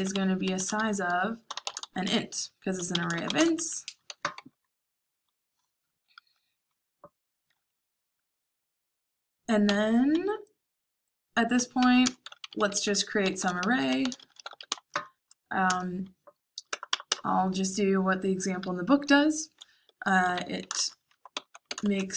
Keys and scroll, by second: 0.0-4.8 typing, 9.5 o, 11.5-14.3 typing, 15.5 typing, 15.6 Return, 16.7 BackSpace, 16.8 BackSpace, 17.0 BackSpace, 19.5-22.1 typing.